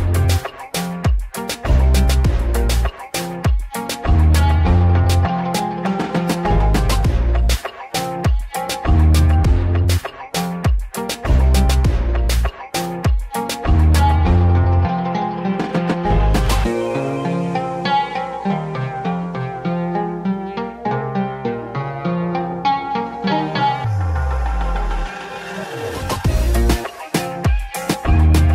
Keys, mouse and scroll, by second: 0.1 click, 1.1 s, 5.6-7.2 middle drag, 7.2 click, 7.9 click, 8.4 s, 14.1-16.1 drag, 18.0 click, 22.9 click, 23.7 0, 24.6 scroll up 1, 24.6 middle click, 25.3 click, 26.1 shift+a, 28.3 s.